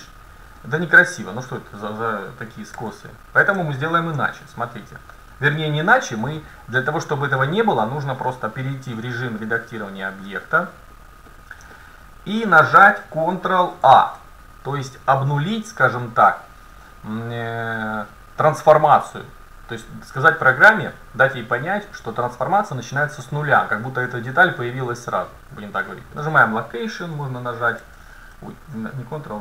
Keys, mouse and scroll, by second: 0.1-0.6 scroll up 1, 0.6-1.1 scroll down 1, 1.1-1.9 scroll down 1, 1.9 middle click, 2.8 ctrl+z, 3.9-5.8 middle drag, 6.3 Tab, 9.5 middle click, 11.7 middle click, 13.9 ctrl+a, 27.9 ctrl+z.